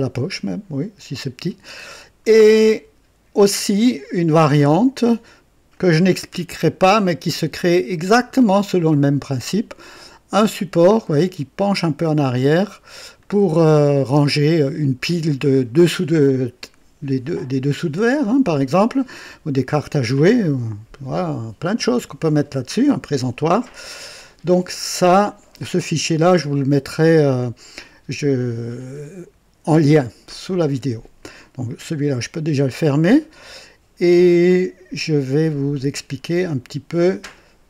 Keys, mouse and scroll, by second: 0.3-1.7 drag, 1.8-3.1 drag, 5.7 click, 6.8-8.7 right drag, 11.2-12.7 drag, 13.2 click, 18.5-19.4 drag, 32.0 click, 34.3 click, 35.7 click.